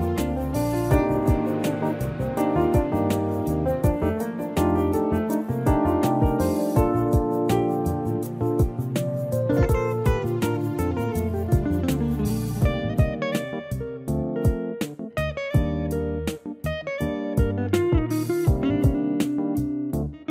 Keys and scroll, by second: 0.2 3, 1.2 -.